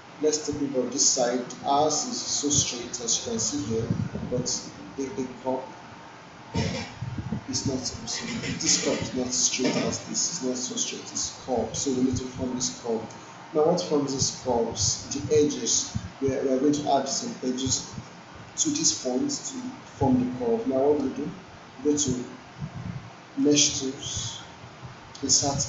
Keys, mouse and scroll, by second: 3.2-3.8 alt+drag, 4.7 alt+middle click, 23.4 click.